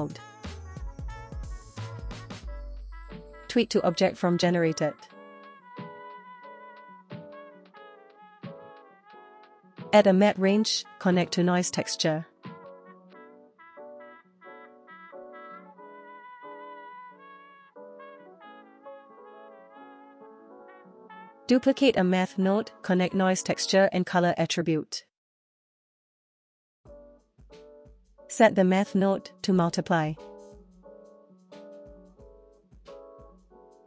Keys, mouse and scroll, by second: 1.2 middle click, 2.1 scroll down 1, 2.3 middle click, 3.1-3.8 drag, 4.7 middle click, 5.9 click, 6.8 click, 7.7 middle click, 8.7 click, 9.3 click, 9.9 shift+a, 12.1 Down, 16.8 click, 17.0 click, 17.5 click, 18.0 click, 18.8 click, 19.3 space, 19.5 space, 19.8 click, 20.2 click, 21.4 shift+d, 23.2 middle click, 26.4 click, 27.2 click, 28.0-29.2 drag, 30.1 space, 30.7 space, 31.0 middle click, 31.4-33.7 scroll down 4.